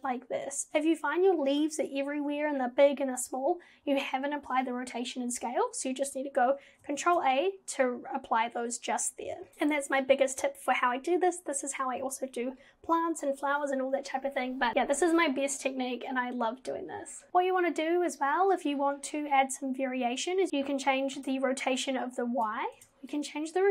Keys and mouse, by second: 7.0 ctrl+a, 9.5 Escape, 17.3 ctrl+z, 20.4 click, 21.2 ctrl+z, 21.7 click, 22.8 ctrl+z, 23.1-23.7 drag.